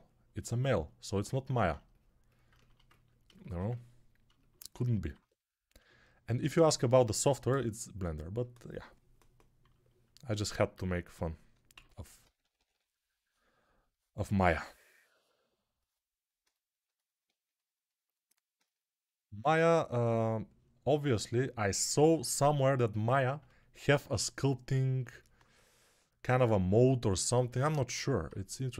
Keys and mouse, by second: 10.6 1, 11.6-12.6 typing.